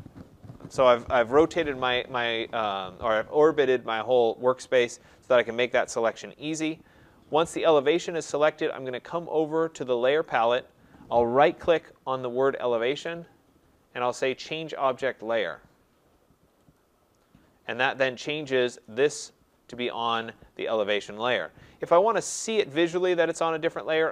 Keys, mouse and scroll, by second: 13.0 right click, 16.7 click, 22.7 click.